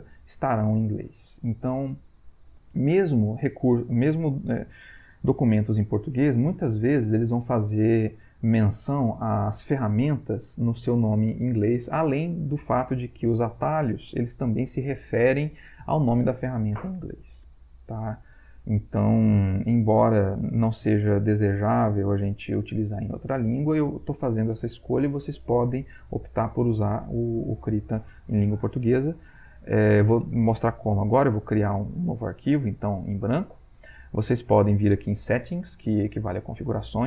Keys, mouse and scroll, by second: 31.7 click, 33.2-34.4 middle drag, 35.3-36.4 middle drag, 36.4 click.